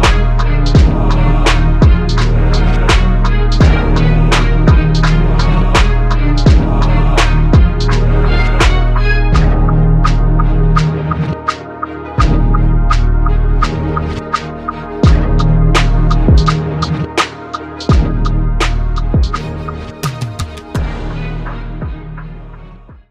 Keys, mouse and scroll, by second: 4.7 z, 5.9 KP_3, 6.9 s, 14.6 s, 16.4 z.